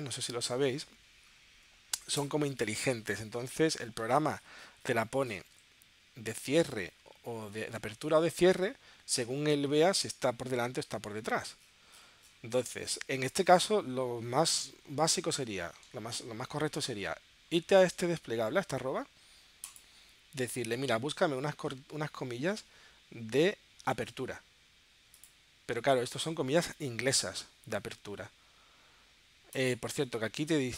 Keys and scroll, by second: 2.2 BackSpace.